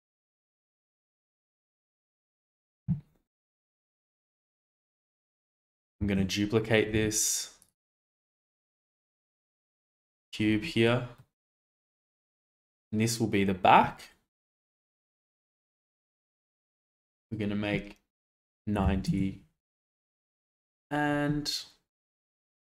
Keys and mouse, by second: 0.6 g, 4.1-4.4 middle drag, 4.9 shift+middle click, 5.9 shift+d, 6.9 z, 7.5 click, 8.3 ctrl+z, 10.0 shift+d, 10.4 Escape, 11.1-11.5 middle drag, 17.2-19.0 drag, 20.7-22.6 drag.